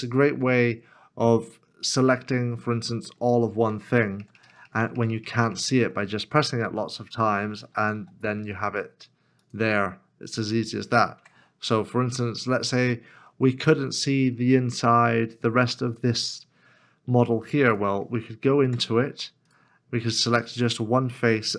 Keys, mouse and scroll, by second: 2.9 middle click, 4.6 ctrl+KP_Add, 4.8 ctrl+KP_Add, 4.9 ctrl+KP_Add, 5.1 ctrl+KP_Add, 5.2 ctrl+KP_Add, 5.5 ctrl+KP_Add, 7.9 g, 11.2 Tab, 12.2-12.6 scroll up 1, 12.8 shift+middle click, 13.5-15.3 scroll up 1, 18.6-20.6 scroll.